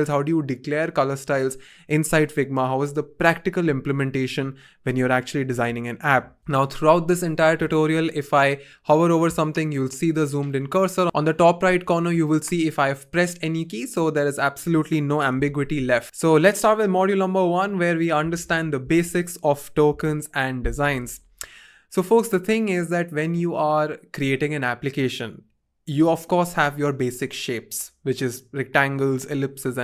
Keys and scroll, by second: 15.3 n, 21.0-21.8 typing.